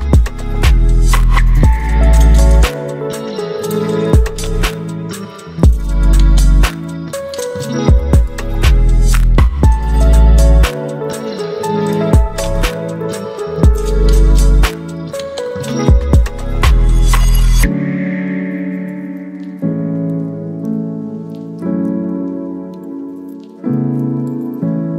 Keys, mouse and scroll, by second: 2.8-5.2 drag, 5.2 ctrl+t, 7.3-21.0 alt+drag.